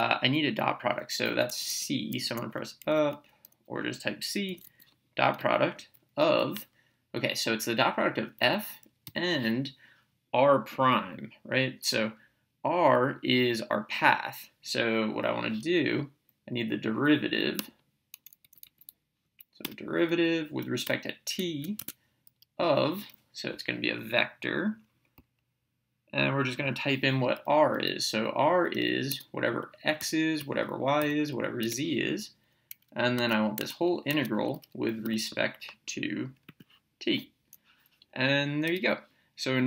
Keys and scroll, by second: 1.4 Up, 2.8 Down, 3.2 Right, 4.5 Down, 5.3 Return, 8.4 f, 9.0 ,, 18.4 Left, 19.6 Return, 20.8 t, 21.8 Tab, 26.7 (, 29.1-31.6 typing, 33.2 Tab, 35.0 t, 36.4 Return, 38.7 BackSpace.